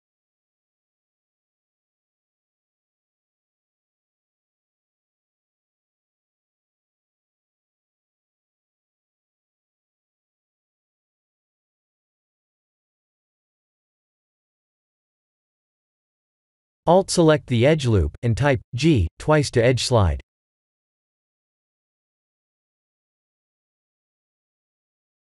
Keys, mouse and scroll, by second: 1.5 click, 2.2 g, 2.3 click, 3.2 b, 4.0 g, 5.9 click, 7.2 click, 8.8 b, 9.6 g, 11.5 click, 12.2 click, 17.0 alt+click, 17.7 g, 21.4 ctrl+r.